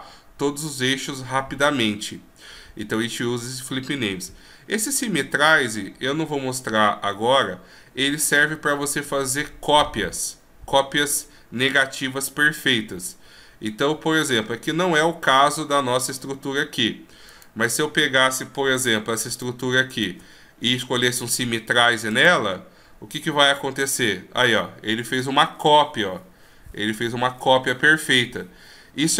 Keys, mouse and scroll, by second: 2.8 w, 17.4 right click, 18.9 shift+right click, 19.5 shift+right click, 21.1 w, 23.7 g.